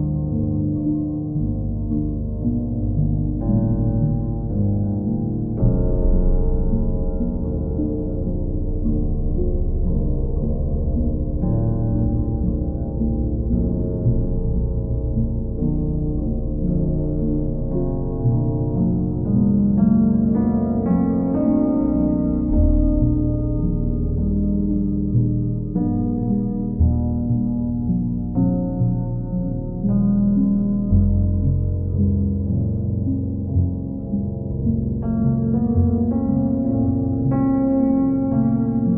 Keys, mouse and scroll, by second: 1.6 right click, 4.8 click, 10.6 click, 11.5 click, 12.1 click, 12.7 click, 13.0 click, 13.5 click, 14.2 click, 16.3 click, 18.5 click, 20.2 click, 22.6 click, 24.7 click, 25.2 shift+click, 26.9 shift+click, 28.0 ctrl+click, 29.2 ctrl+click, 29.5 w, 32.6 click, 34.7 click, 35.3 ctrl+click, 36.2 click, 36.6 shift+click, 37.1 alt+click.